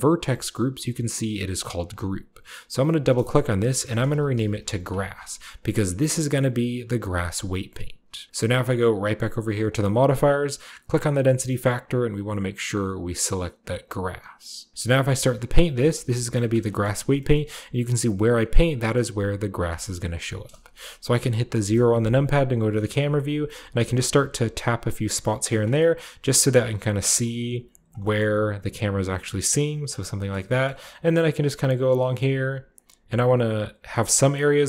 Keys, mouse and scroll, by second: 2.7 click, 2.8 click, 3.7-4.5 typing, 4.8 click, 5.1-6.0 scroll down 1, 6.5 middle click, 6.5-7.0 scroll down 1, 9.5-12.2 drag, 13.6 click, 14.7 click, 15.7 f, 15.8 click, 16.0-17.4 drag, 16.6 middle click, 16.7-18.4 scroll up 2, 17.5-20.7 shift+middle drag, 17.7-21.0 shift+drag, 18.4-19.6 shift+scroll down 2, 19.6-20.3 scroll down 1, 20.3-21.5 scroll down 1, 21.5 KP_0, 22.3-24.1 scroll up 1, 22.6-25.2 shift+middle drag, 22.9 f, 23.1 shift+click, 23.4 shift+click, 23.6 shift+click, 23.9 shift+click, 24.1 shift+click, 24.4 shift+click, 24.6 click, 24.8 click, 25.1-27.9 drag, 25.6-27.4 scroll down 1, 26.1 f, 27.9 shift+middle click, 28.1 shift+click, 28.2 shift+middle click, 28.4 shift+click, 28.4 shift+middle click, 28.5 shift+click, 28.6 shift+middle click, 28.7 shift+click, 28.7 shift+middle click, 28.8 shift+click, 29.1 shift+middle click, 29.2 shift+click, 29.9 middle click, 30.2-32.0 scroll down 2, 30.5-32.1 middle drag, 30.7 f, 32.1 f, 33.8 click, 34.4 middle click, 34.6 click, 34.6 middle click.